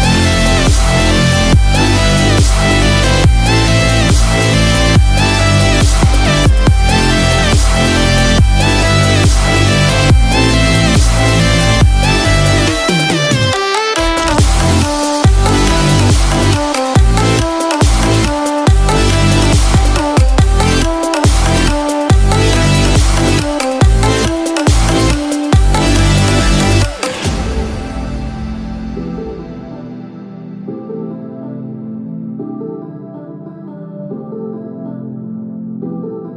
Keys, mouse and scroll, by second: 5.1 click, 5.7 scroll down 1, 6.2 scroll down 1, 7.0-8.2 scroll down 1, 8.2 shift+middle click, 9.4 scroll up 1, 11.2 click, 11.9 scroll down 2, 12.2 shift+middle click, 12.6 middle click, 22.4 click, 22.4 KP_0, 25.4 KP_7, 26.9 click, 26.9 scroll down 3, 28.7 shift+click, 29.3 click, 29.7 click, 30.3 shift+click, 31.8 shift+click.